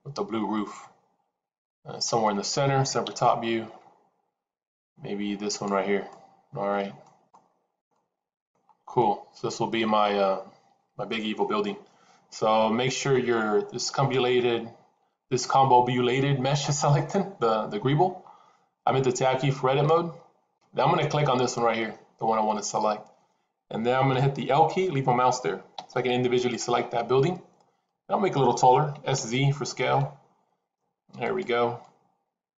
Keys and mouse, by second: 3.1 KP_7, 5.4 click, 5.9-6.9 middle drag, 7.2-7.7 middle drag, 7.8-8.4 middle drag, 8.9 middle click, 13.9 click, 19.6 Tab, 25.8 l, 28.9 s, 31.7-32.5 middle drag.